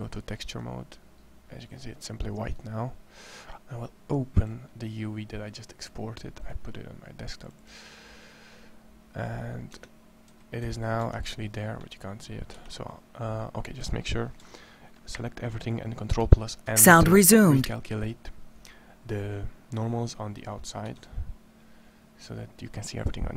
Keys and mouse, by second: 9.5 Tab, 10.4 a, 10.7 a, 10.7 Tab, 12.3 Tab, 16.4 ctrl+n, 20.6 Tab.